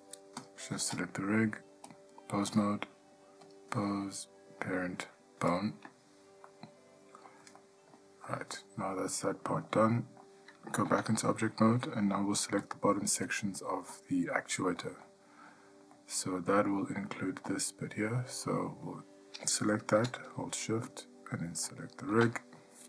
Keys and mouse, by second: 0.6 shift+click, 2.1-2.7 drag, 3.7-5.8 drag, 6.7-7.5 middle drag, 7.8-8.2 ctrl+middle drag, 8.5 middle drag, 9.0-9.8 shift+middle drag, 10.1 shift+drag, 10.4 middle click, 11.0 Tab, 12.8 click, 13.5 click, 14.7 ctrl+middle drag, 15.2-15.7 middle drag, 16.2-16.9 ctrl+middle drag, 17.7 click, 18.6-19.1 middle drag.